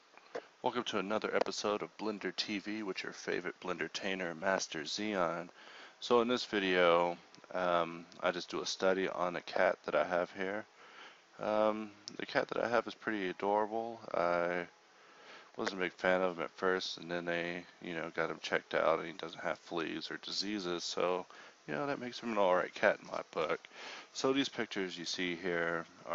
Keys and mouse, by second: 8.2-9.4 drag, 10.8 click, 13.7 click.